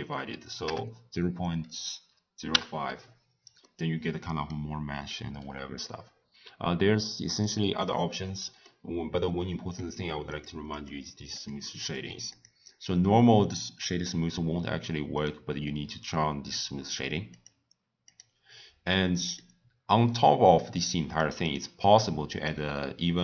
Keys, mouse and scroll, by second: 3.6-6.7 middle drag, 7.3 click, 8.6-10.4 middle drag, 10.4 click, 10.8 click, 11.4 click, 11.9 click, 12.4 click, 12.9-15.2 right drag, 15.2 click, 17.3 click, 18.0 click, 19.0-19.3 drag, 20.0 scroll down 1, 20.1-21.4 middle drag, 21.4 click, 22.3 click.